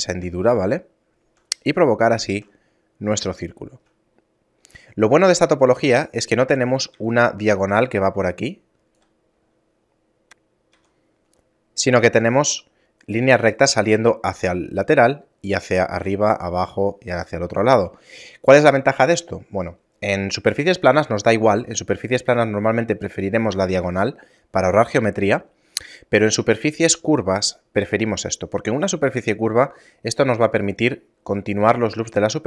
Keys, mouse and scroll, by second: 0.4 a, 0.8 shift+middle click, 1.9 shift+middle click, 3.5 shift+middle click, 5.4 right click, 7.0 d, 7.9-8.3 d, 8.3 right click, 9.0 d, 17.1 middle click, 17.7 shift+middle click, 19.8 middle click, 20.7 scroll down 1.